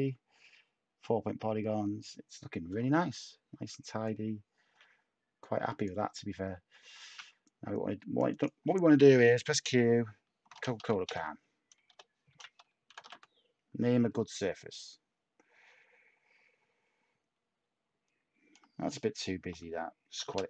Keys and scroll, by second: 7.0 a, 9.1 q, 10.2-13.6 typing, 18.6-20.4 typing.